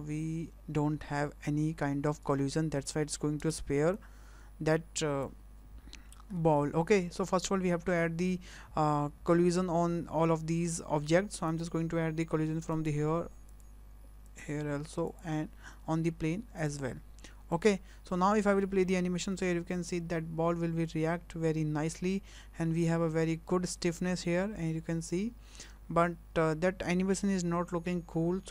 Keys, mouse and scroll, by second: 1.0-2.7 scroll down 4, 2.7 space, 3.4 space, 3.9 click, 5.9 scroll up 3, 6.4 shift+middle click, 7.0 shift+middle click, 9.3 shift+middle click, 11.3 click, 12.7 click, 13.5 click, 14.2 click, 15.1 click, 16.6 click, 17.5 click, 18.2 shift+middle click, 18.6 middle click, 19.3 space.